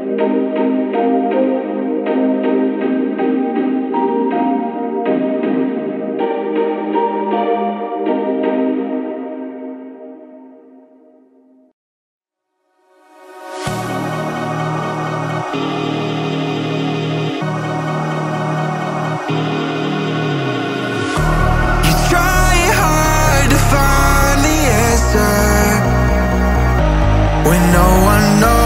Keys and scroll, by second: 0.0 space, 3.1 Return, 13.6 Return, 16.0 space.